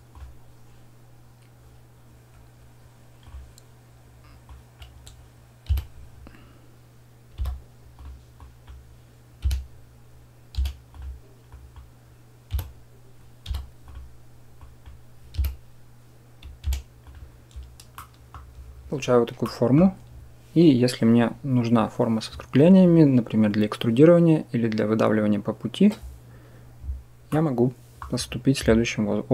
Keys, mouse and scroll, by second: 0.0-3.1 middle drag, 3.1 click, 3.1-4.4 middle drag, 4.4 click, 5.5 e, 8.2 click, 9.2 e, 11.4 click, 12.4 e, 14.5 click, 15.3 e, 17.8 click, 19.3 click, 27.2 click, 27.3 middle click.